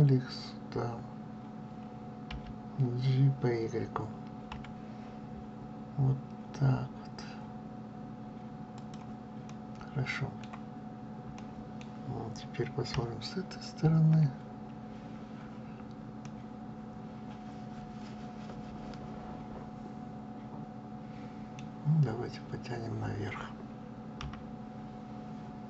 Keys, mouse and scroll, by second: 0.2 scroll up 2, 2.2 g, 9.4-12.8 middle drag, 12.8 KP_3, 16.1-19.2 middle drag, 24.1 KP_3.